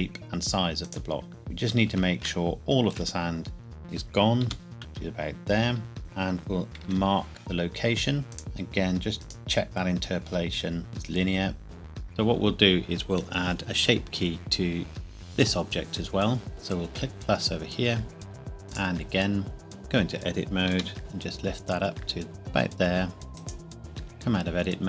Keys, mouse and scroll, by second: 0.8 click, 1.2 scroll up 1, 1.3 middle click, 2.4 shift+middle click, 3.1-3.7 scroll up 1, 4.4 g, 4.8 z, 4.9 g, 6.0 scroll down 1, 6.8 i, 8.3 scroll down 1, 9.2 right click, 11.7 Tab, 16.5 click, 18.7 click, 19.7 Tab, 20.7 g, 21.0 z, 23.4 click, 24.1 Tab.